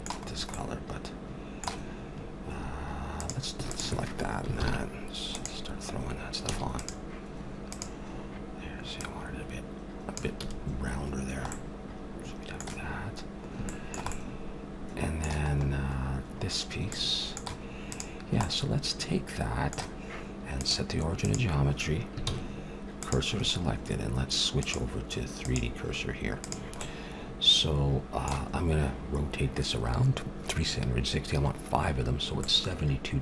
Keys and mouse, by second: 0.6 middle click, 3.1-4.5 drag, 4.5 ctrl+l, 6.5 a, 6.7-10.8 drag, 10.4 a, 11.2-17.8 middle drag, 17.8-19.7 drag, 19.7 middle click, 20.6-22.3 drag, 22.2 shift+s, 24.6-26.3 drag, 26.4 click, 26.8 middle click, 27.4 click, 28.1 middle click, 32.4-33.2 middle drag.